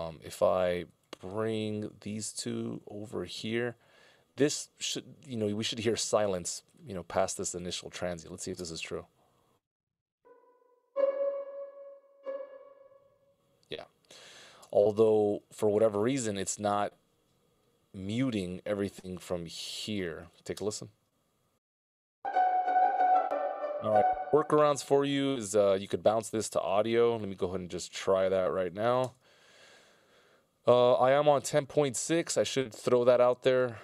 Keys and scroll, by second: 3.1 ctrl+alt+Left, 3.8 ctrl+alt+Left, 8.4 space, 14.9 space, 20.4 space, 28.6 ctrl+b, 29.2 Return.